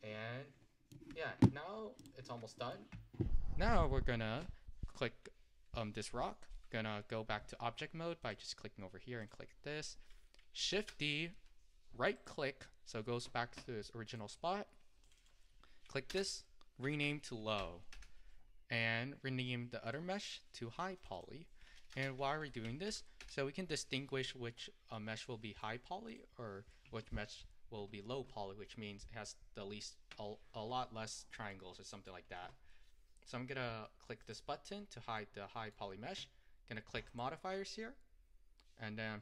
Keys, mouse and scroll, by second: 2.1 click, 2.8-10.9 middle drag, 10.9 shift+d, 14.2 click, 15.2-18.2 drag, 20.1 click, 21.2-24.4 drag, 24.4-25.0 scroll up 2, 25.0-26.2 middle drag, 26.2 click, 31.6-34.3 middle drag, 34.3 click, 35.2-39.2 middle drag.